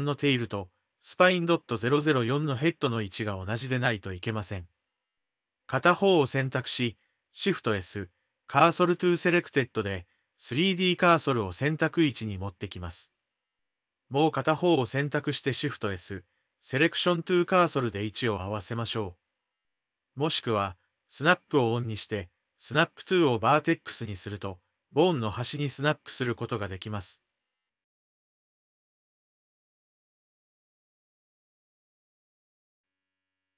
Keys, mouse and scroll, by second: 5.3-6.5 middle drag, 9.3 shift+s, 17.5 shift+s, 22.4 ctrl+z, 23.3 click, 24.3 click, 24.8-27.0 drag, 28.3 g, 30.8 click, 30.9 Tab, 31.4 click, 32.1 click.